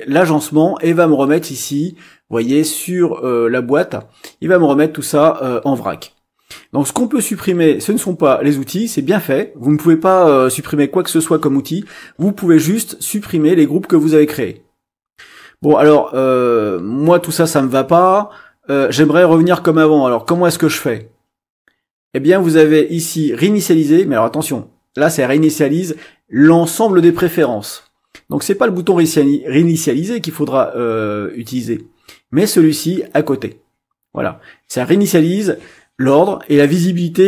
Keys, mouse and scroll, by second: 7.8 click.